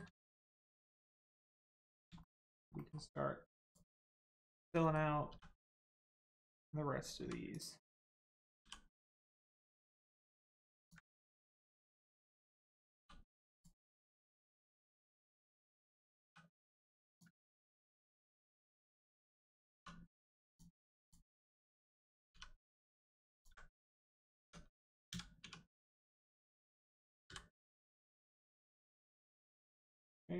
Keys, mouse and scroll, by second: 0.1 shift+middle click, 0.5 middle click, 0.6 middle click, 1.3 click, 1.6 middle click, 2.2 shift+middle click, 2.4 scroll up 1, 2.7 middle click, 3.6 click, 4.0 middle click, 4.5 shift+middle click, 4.8 middle click, 5.2 e, 6.4 ctrl+click, 7.2 1, 7.5 click, 7.8 middle click, 8.6 g, 8.8 middle click, 10.8 ctrl+click, 11.1 middle click, 11.8 shift+middle click, 12.1 middle click, 12.2 middle click, 13.0 2, 13.5 click, 13.8 middle click, 17.1 ctrl+click, 17.4 middle click, 18.2 scroll up 1, 18.4 shift+middle click, 18.8 middle click, 18.8 middle click, 19.7 2, 20.4 click, 21.0 shift+click, 21.4 middle click, 23.3 ctrl+click, 24.0 Tab, 25.0 a, 25.4 1, 26.5 middle click, 27.2 m, 28.6 click.